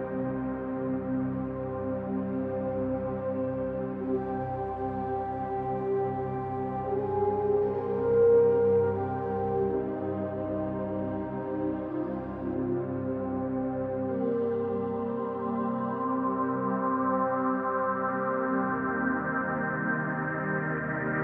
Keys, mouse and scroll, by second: 0.1-1.2 right drag, 1.1 scroll down 2, 1.2-4.2 middle drag, 2.2 scroll up 2, 2.9 scroll down 2, 3.4-4.2 scroll down 2, 4.2-6.0 drag, 5.8 scroll up 2, 6.0-8.7 middle drag, 6.5-6.9 scroll up 2, 7.2-7.8 scroll up 2, 7.8 Tab, 8.7 click, 8.9-10.1 middle drag, 9.6-10.1 scroll up 2, 10.1 shift+click, 10.6-13.0 middle drag, 13.0 click, 14.2-17.9 middle drag, 14.5 scroll down 2, 15.5 ctrl+r, 17.2 click, 17.9 ctrl+r.